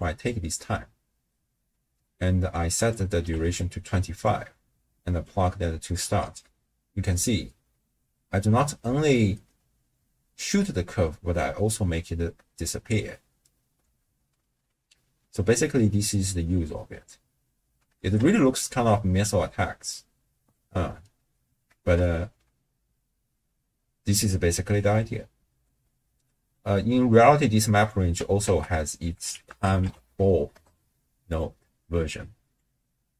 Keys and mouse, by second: 2.8 click, 4.3-5.3 drag, 6.1 shift+space, 10.5 space, 13.8 shift+space, 18.0 shift+space, 21.2 space, 21.8 shift+space, 22.3 space, 25.5 space, 27.3 click, 28.4 ctrl+a, 30.1 l, 31.6 middle click, 32.5-33.1 drag.